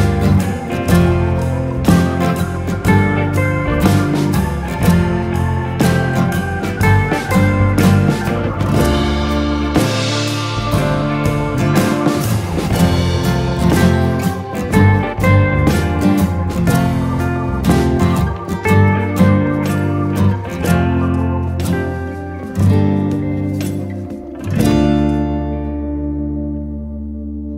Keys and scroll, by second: 9.4 Escape, 10.1 d, 12.5 1, 12.6 ., 12.7 5, 13.0 Return, 18.0 Escape.